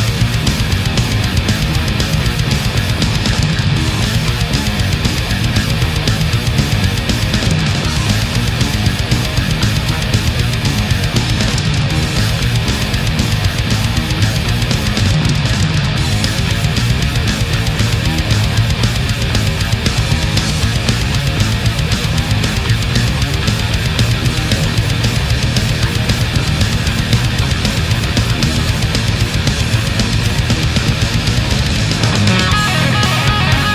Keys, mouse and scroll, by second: 0.3 space, 1.0 click, 2.1 click, 3.4 click, 4.2 Return, 5.3 a, 6.4-7.5 middle drag, 8.5 right click, 9.0 shift+right click, 9.7 shift+right click, 10.2 shift+right click, 11.0-13.2 drag, 13.4-19.2 middle drag, 19.7 shift+right click, 23.2 ctrl+z, 26.7-28.5 middle drag, 28.5 scroll up 2, 29.9-30.4 shift+middle drag, 30.6 shift+scroll up 2, 31.6 a, 33.3 ctrl+z.